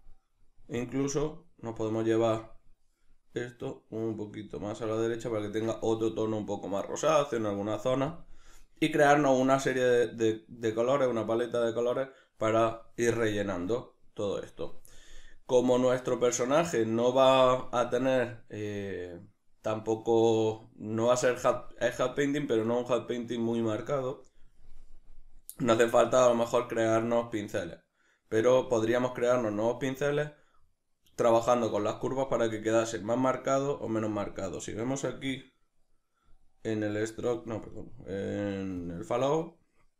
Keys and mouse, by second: 3.6 click.